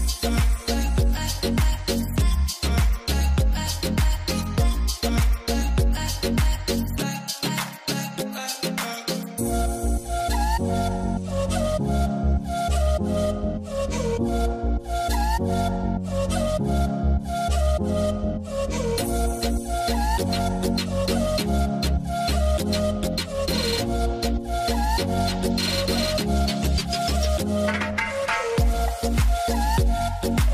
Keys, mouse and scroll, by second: 3.8 right click, 3.9 3, 4.0 3, 4.1 Return, 10.4 Return, 11.7 right click, 12.9 w, 14.7 middle click, 20.7 double click, 21.4 middle click, 27.2 q, 30.0 alt+w.